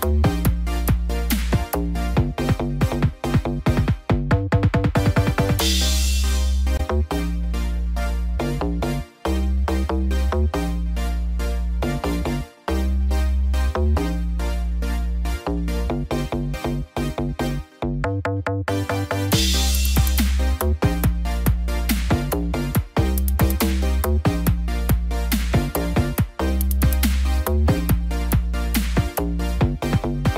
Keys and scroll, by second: 8.6 ctrl+z.